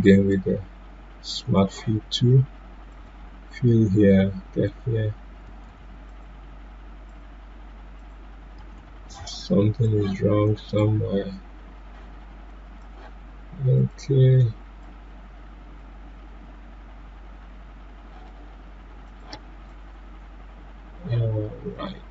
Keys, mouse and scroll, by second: 5.6 ctrl+z, 6.0 click, 8.7 ctrl+z, 9.8-18.4 drag, 19.0 click.